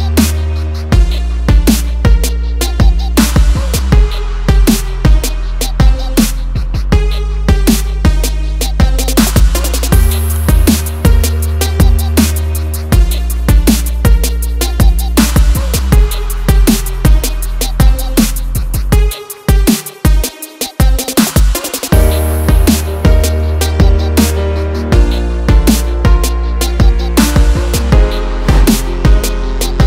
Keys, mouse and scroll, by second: 5.7 click, 7.1 click, 9.1 click, 10.6 F4, 10.6 ctrl+o, 11.5 scroll down 1, 12.8 scroll down 1, 15.3 scroll down 1, 18.5 scroll down 1, 19.3 scroll down 1, 22.9 scroll down 1, 23.4-23.7 scroll up 1, 25.3 click, 26.3 click, 29.0 click, 29.5 F4.